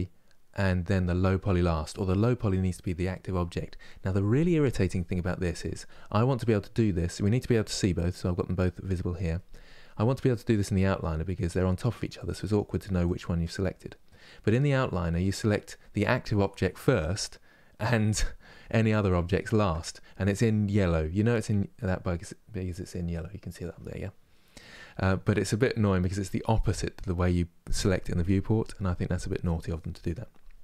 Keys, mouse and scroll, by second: 6.1-11.3 drag, 11.5 click, 12.2 click, 15.2 click, 18.7 shift+click.